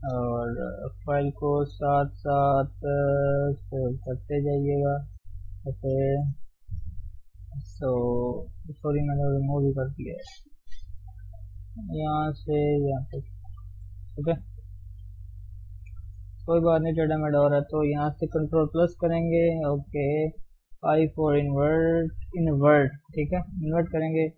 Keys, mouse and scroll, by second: 0.0 ctrl+space, 0.2 scroll down 1, 0.5 shift+middle click, 0.7 scroll up 1, 0.8 Tab, 1.9 ctrl+shift+s, 3.6 ctrl+shift+s, 4.4 ctrl+shift+s, 4.8 ctrl+shift+s, 5.3 shift+middle click, 5.4-6.6 scroll up 4, 6.0 click, 6.6 click, 6.8 KP_3, 7.6 click, 8.5 shift+z, 8.6 shift+middle click, 9.2 click, 9.6 Tab, 10.3-11.6 shift+middle drag, 11.6-16.2 drag, 16.2 shift+z, 16.8 click, 18.4 ctrl+KP_Add, 20.8 i, 23.3 KP_1.